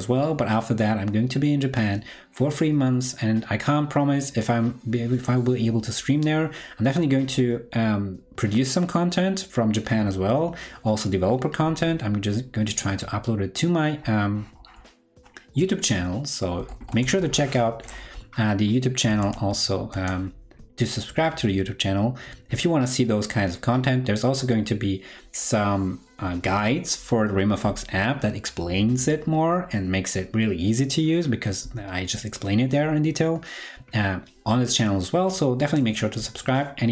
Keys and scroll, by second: 14.7 super+t.